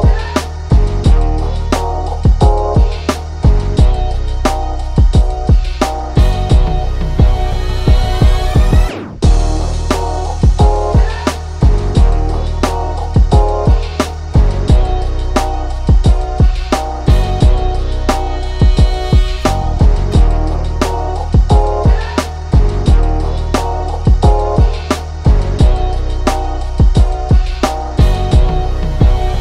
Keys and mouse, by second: 0.4 click, 1.8 click, 2.7 click, 3.7 right click, 4.8 click, 5.6 right click, 5.8 click, 6.6-8.9 drag, 8.9 click, 9.4 ctrl+shift+[, 10.2-15.6 drag, 15.6 ctrl+shift+[, 16.2-20.7 drag, 21.8-23.3 drag, 23.3 ctrl+z, 23.7 click, 24.6 ctrl+z, 24.9-28.5 drag.